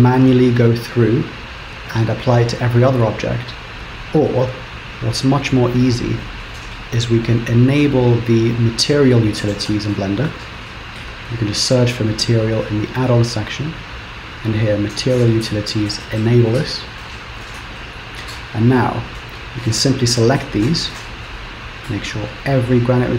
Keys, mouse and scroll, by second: 0.3 click, 1.3 click, 2.0 click, 3.7 click, 6.0 click, 8.6 click, 19.6 shift+click, 20.2 shift+click, 21.0 shift+click, 21.4 shift+click, 22.4 shift+click.